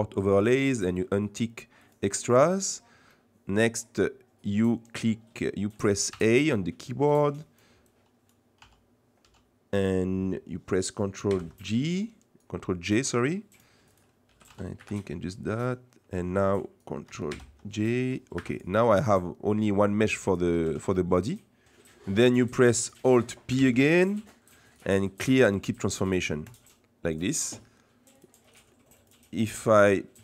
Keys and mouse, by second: 2.7 click, 3.0-4.0 middle drag, 5.4 middle click, 6.1 a, 7.2 click, 8.0 click, 8.5 z, 11.3 ctrl+j, 13.5 click, 14.3 g, 15.4 click, 17.4 ctrl+j, 18.0 g, 19.5 middle click, 20.5 g, 23.5 alt+p, 28.2-29.6 right drag.